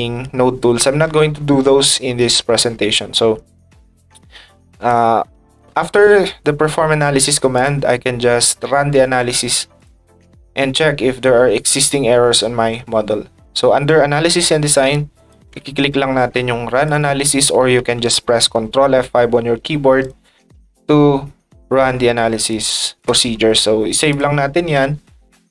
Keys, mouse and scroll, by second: 4.9 ctrl+click, 7.5 click, 9.8 click, 14.9 ctrl+click, 16.8 ctrl+click, 17.2 ctrl+click, 20.0 click, 22.5 click, 23.0-24.1 drag, 24.2 click.